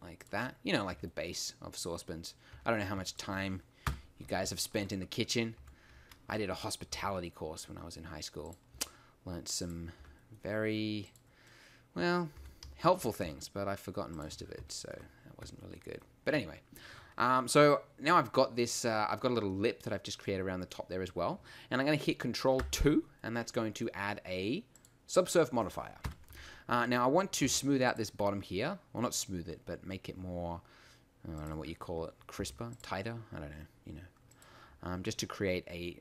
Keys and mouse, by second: 0.9 Tab, 2.5 Tab, 3.9 KP_1, 5.6 e, 6.9 g, 8.5 click, 8.8 s, 10.0 g, 12.4 e, 13.4 s, 14.3 Tab, 22.6 ctrl+2, 26.0 KP_1, 26.3 Tab, 27.5 ctrl+r, 31.4-34.4 drag, 32.4 ctrl+r.